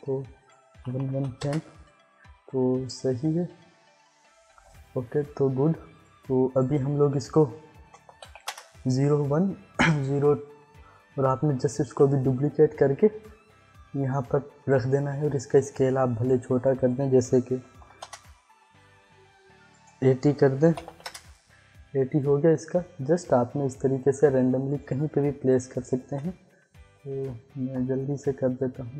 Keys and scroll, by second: 0.7 1, 1.1 0, 1.4 Return, 7.7 Return, 7.8-8.7 typing, 11.8 ctrl+d, 15.1 s, 17.6 8, 18.0 Return, 20.6 8, 20.9 0, 21.0 Return, 26.0 ctrl+d.